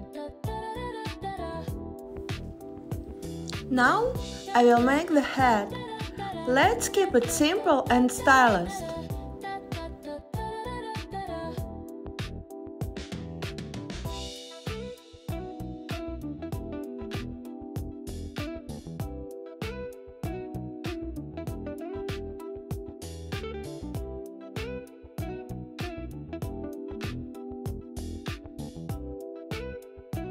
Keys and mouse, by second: 0.1 click, 2.3 Tab, 6.6 click, 9.9 g, 13.1 click, 14.3 shift+click, 15.4 g, 17.1 click, 19.7 click, 20.5 g, 22.0 click, 22.9 g, 23.7 click, 25.3 g, 27.8 click, 30.2 Tab.